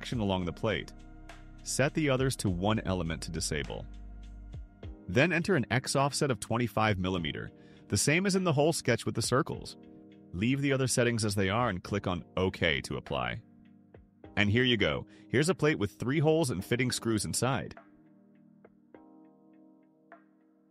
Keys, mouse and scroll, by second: 0.5 3, 0.8 click, 1.3 1, 3.0 click, 4.2 2, 4.7 5, 12.8 click, 15.1 click, 16.5-20.7 drag.